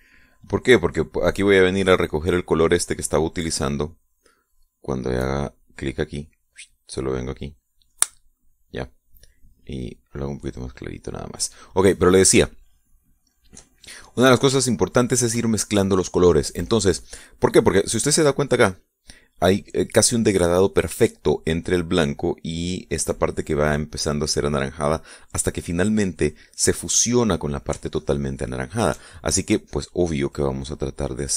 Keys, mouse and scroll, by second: 6.2 click, 7.2 click, 8.9 click, 10.8-12.2 drag, 13.4-16.5 shift+middle drag, 29.0-30.4 shift+middle drag.